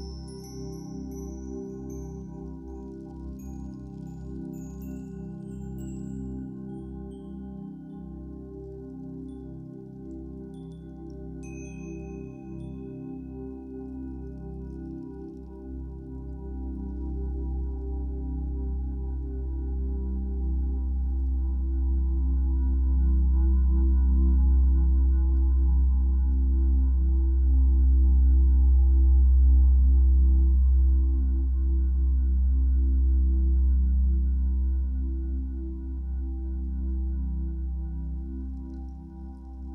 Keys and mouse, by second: 0.0 typing, 1.5 click, 2.7 typing, 3.5 click, 4.2 typing, 5.6 click, 7.1-8.8 drag, 8.8 typing, 10.6 click, 12.1 typing, 14.2 click, 15.2-24.3 drag, 24.3-24.7 typing, 26.0-28.3 drag, 29.7-30.3 drag, 29.7-30.4 typing, 32.7-35.3 drag, 32.7 typing, 35.5-36.7 ctrl+alt+drag.